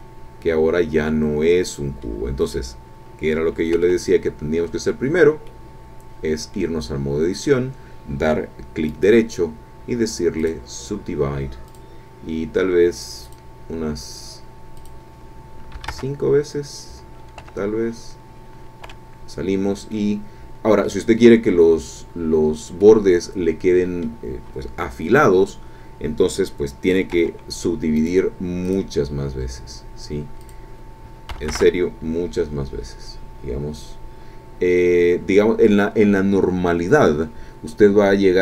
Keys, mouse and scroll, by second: 3.8 Tab, 4.5-4.8 scroll down 2, 5.4-6.8 drag, 6.8-7.5 scroll up 2, 8.9 right click, 10.4 click, 11.7 click, 13.2 click, 14.8 click, 15.7 KP_5, 15.9 KP_Enter, 17.4 Escape, 18.9 Tab, 19.5-19.9 scroll down 2, 19.9-21.1 drag, 22.8-24.2 drag, 27.1 Tab, 27.9 right click, 28.6 click, 30.4 click, 31.3 KP_1, 31.4 KP_0, 31.5 KP_Enter.